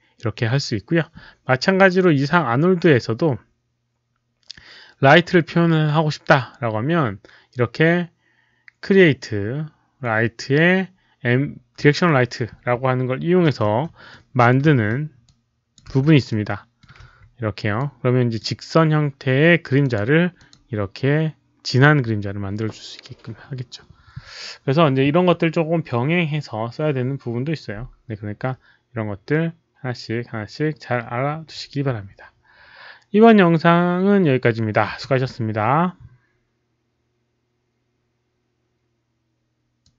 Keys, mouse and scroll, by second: 11.7 click, 13.7 click, 13.7-17.5 typing, 14.1-14.5 middle drag, 14.7 click, 15.2-15.7 drag, 15.2 middle click, 16.2 middle click, 17.0 click, 17.7 click, 19.8 click, 20.3 click, 20.4-21.2 typing, 20.7 middle click, 24.1-24.9 typing, 24.4 click, 24.4 middle click, 26.0-26.7 typing, 26.2 click, 26.2 middle click, 39.8 click.